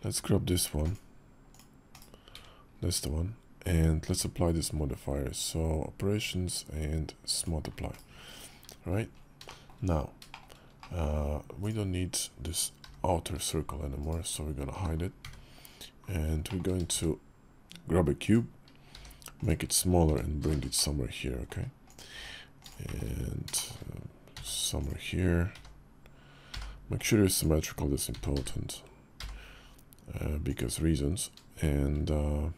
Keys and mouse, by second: 1.7 /, 3.3 KP_5, 3.8 q, 7.7 /, 9.2 shift+middle drag, 9.6 KP_5, 10.1 shift+middle click, 10.6 middle click, 11.4-12.6 drag, 12.6 g, 14.5 h, 15.0 `, 16.2 shift+click, 16.6 shift+a, 18.7 s, 19.8 g, 21.9 s, 22.6 shift+middle drag, 23.3 shift+middle drag, 24.1 s, 25.3 g, 27.9 s.